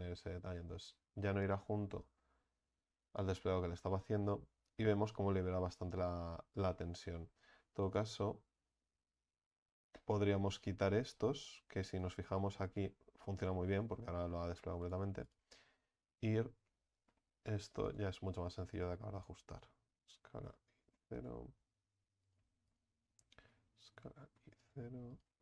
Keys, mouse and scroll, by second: 0.0 a, 0.2 a, 3.3 u, 6.9 scroll up 2, 7.9 right click, 8.6-9.0 scroll down 4, 10.5-11.3 scroll up 4, 11.8 a, 12.1 a, 14.9-16.7 right drag, 16.7 s, 18.3 right click, 20.0 s, 22.2 right click, 23.5 s, 25.1 right click.